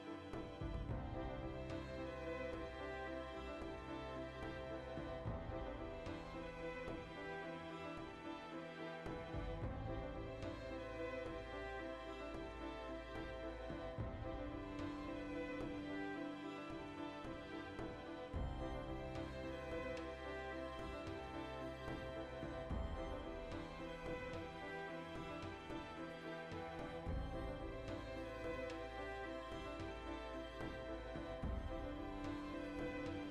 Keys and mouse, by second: 0.2 ctrl+r, 0.4 right click, 0.5 ctrl+r, 0.8 right click, 0.8 ctrl+r, 1.2 right click, 1.4-3.5 ctrl+middle drag, 3.2 ctrl+r, 3.5 right click, 3.6 ctrl+r, 3.8 right click, 3.9 ctrl+r, 4.5 alt+shift+right click, 5.1 s, 7.0 right click, 7.3 click, 7.6 g, 8.4 click, 8.8 ctrl+r, 9.1 right click, 9.2 ctrl+r, 9.4 right click, 9.5 ctrl+r, 10.0-11.1 alt+shift+right drag, 11.1 click, 11.4 Tab, 11.6-14.0 middle drag, 14.0-14.5 right drag, 14.5 KP_Decimal, 14.9-17.3 middle drag, 16.2 alt+q, 16.7 Tab, 17.3 right click, 17.4 middle click, 17.8 right click, 17.9-21.3 middle drag, 19.2 g, 21.3 ctrl+r, 22.0 click, 22.2 right click, 22.5 g, 23.1 click, 23.2-24.2 middle drag, 24.2 Tab, 24.8 ctrl+2, 25.1-26.7 middle drag, 26.7 click, 27.0-29.3 shift+middle drag, 27.5 Tab, 28.9 ctrl+r, 29.3 right click, 29.5-31.8 middle drag, 29.7 ctrl+b, 31.8 click, 31.9-33.3 middle drag.